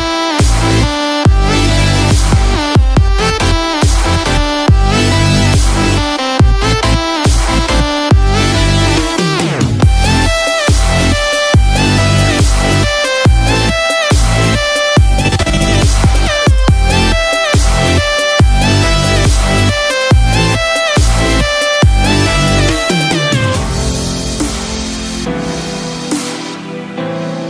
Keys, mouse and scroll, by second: 0.4-1.2 scroll down 2, 1.2 click, 1.7 scroll up 1, 3.2 scroll up 1, 3.2 space, 8.8 click, 12.9-13.5 scroll down 2, 13.2-13.6 scroll up 3, 14.2 shift+middle click, 14.9 middle click, 19.3 click, 20.9-21.8 scroll up 3, 21.3 shift+middle click, 22.4-22.9 scroll up 1, 23.7 click, 24.6 scroll down 1, 25.1 middle click, 25.7 scroll down 1, 26.1 shift+middle click, 26.6 middle click, 27.3 shift+middle click.